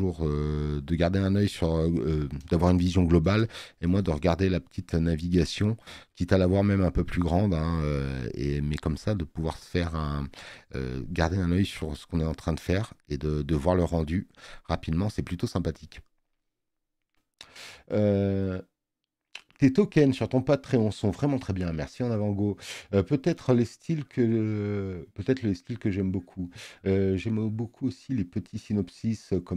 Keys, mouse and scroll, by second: 6.3 click, 7.5 click, 8.9 alt+scroll down 2, 9.5 alt+scroll up 2, 10.3 space, 10.5 click.